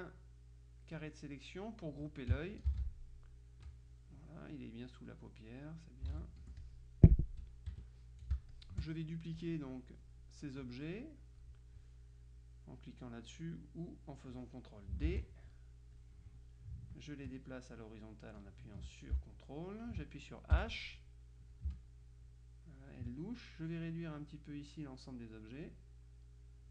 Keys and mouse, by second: 2.8 ctrl+g, 3.7-7.3 drag, 6.2 ctrl+z, 6.5 ctrl+F1, 7.8 KP_Subtract, 8.4 space, 8.6 click, 9.5-10.6 drag, 15.1 ctrl+d, 16.0-20.5 drag, 20.7 h, 21.7-23.6 ctrl+drag, 23.9-26.2 drag.